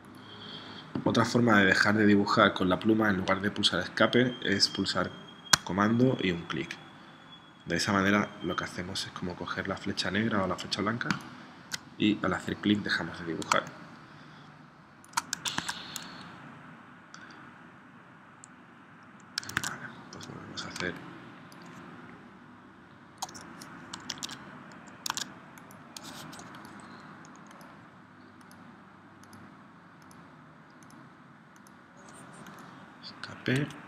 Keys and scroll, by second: 13.5 space, 15.6 super+Tab, 19.6 super+Tab, 20.8 space, 24.2 super+Tab, 25.1 super+Tab, 33.7 Escape.